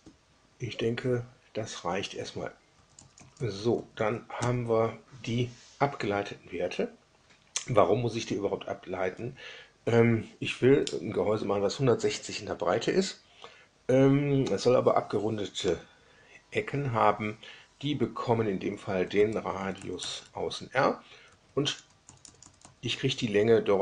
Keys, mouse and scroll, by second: 2.7 Up, 2.9 Up, 3.1 Up, 3.3 Up, 4.4 Right, 9.1 Right, 19.1 Down, 19.3 Down, 19.5 Down, 19.7 Down, 20.2 Left, 21.2 Right, 21.8 Up, 21.9 Up, 22.2 Up, 22.4 Up.